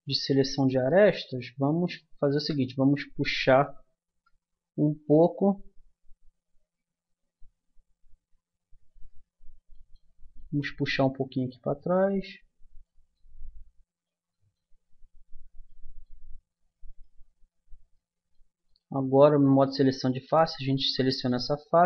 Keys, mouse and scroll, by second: 1.1 middle click, 1.2 click, 1.6 middle click, 2.3 KP_3, 4.0 KP_1, 13.2-18.4 middle drag, 20.1-21.8 middle drag.